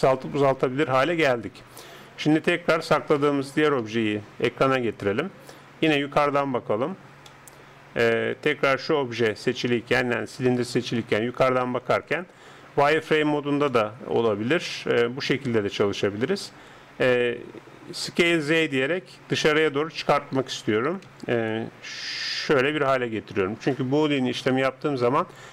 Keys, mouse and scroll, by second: 2.6 Tab, 3.8 alt+h, 5.9 KP_7, 7.3-8.3 middle drag, 8.3-10.9 right drag, 9.7 Tab, 11.1 KP_7, 12.2 z, 13.4 middle click, 14.8 z, 18.1 s.